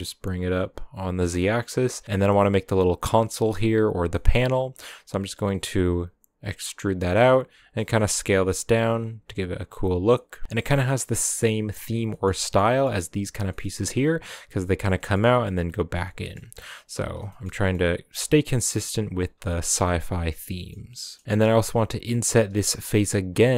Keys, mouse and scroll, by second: 1.3-4.5 middle drag, 4.5 e, 7.5 s, 10.1-10.4 middle drag, 10.4 s, 10.9-11.5 middle drag, 11.5 scroll up 1, 11.8 scroll down 4, 12.1-13.6 shift+middle drag, 13.6-14.8 scroll up 2, 14.8 scroll up 1, 14.8 scroll down 2, 14.9-16.3 shift+middle drag, 16.3 scroll up 3, 16.8 s, 17.2 shift+middle drag, 17.5-18.2 scroll up 2, 17.5 middle drag, 18.2 s, 18.8 scroll up 1, 18.9 s, 19.4-19.8 middle drag, 19.8 s, 20.3-23.5 middle drag.